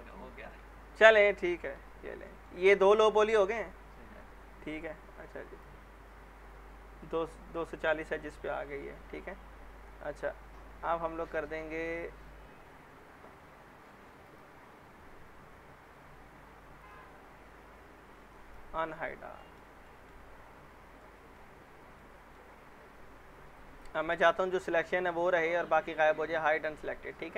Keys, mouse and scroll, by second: 0.1-0.7 alt+middle click, 0.6 scroll down 2, 1.0 alt+middle click, 1.8 p, 2.3 alt+middle click, 2.6 scroll up 1, 3.1-3.6 scroll down 1, 3.6 scroll up 1, 4.6-5.3 scroll down 1, 5.3 click, 10.9-13.2 scroll down 1, 14.2 click, 15.5-16.8 scroll down 1, 16.8 click, 17.5-18.4 scroll up 1, 18.4 click, 18.9 scroll down 1, 19.4 alt+middle click, 20.2-20.8 scroll up 1, 21.0-21.6 alt+middle click, 21.5 scroll down 1, 22.0-22.6 alt+middle click, 22.5 scroll up 1, 23.5 click, 23.6 click, 24.0 middle click, 26.5 click, 27.0 scroll down 1, 27.1 alt+middle click.